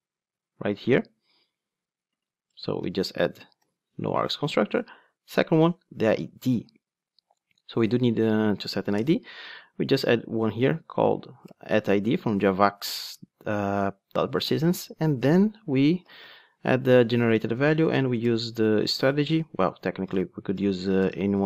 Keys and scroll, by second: 4.1 Return, 8.0 Tab, 11.4 Tab, 11.5 Return, 16.7 Return.